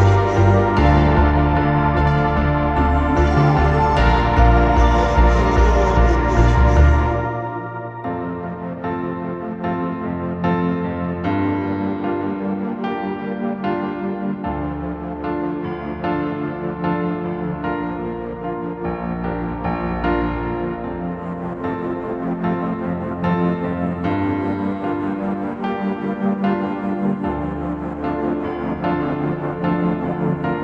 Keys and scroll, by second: 5.5 7, 6.2 4, 7.2 8, 8.0 Return, 13.3 v.